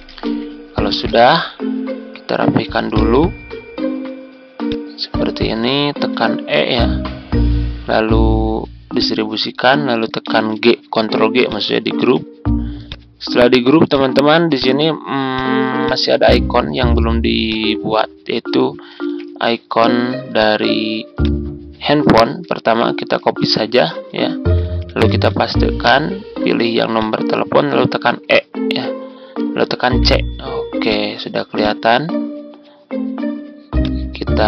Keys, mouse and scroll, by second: 0.0-1.6 typing, 2.8 click, 5.9 e, 8.9 click, 10.2 ctrl+g, 11.4 ctrl+click, 12.8 click, 15.3 shift+click, 17.4-18.5 drag, 19.0 Tab, 20.3 click, 22.1 ctrl+c, 23.3 Tab, 24.3 ctrl+scroll up 1, 25.0 ctrl+v, 26.9 shift+click, 28.0 shift+e, 29.8 c, 30.8 click.